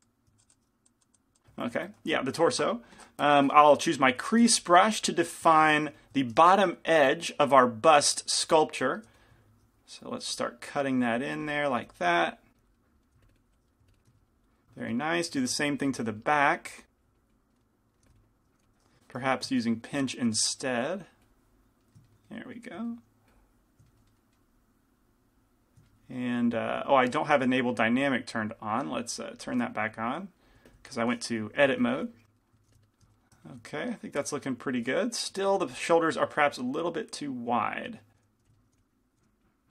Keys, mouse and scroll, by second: 1.8-4.6 middle drag, 4.6 shift+c, 4.6 f, 5.0-6.6 middle drag, 6.0 f, 8.6 f, 9.2 f, 10.0-12.8 drag, 11.9 f, 13.0-14.8 drag, 13.0-15.8 middle drag, 16.1 f, 16.9-18.1 drag, 18.1 f, 18.7 f, 19.4 f, 19.4 p, 22.0 click, 22.0 middle click, 22.0 right click, 25.2 click, 28.4-30.1 drag, 30.7 f, 31.0-32.5 drag, 31.8 f, 31.8 g, 32.7 f, 32.9-34.6 drag, 35.6 g, 37.6 click, 38.2-39.7 typing, 38.6 click, 39.2 right click.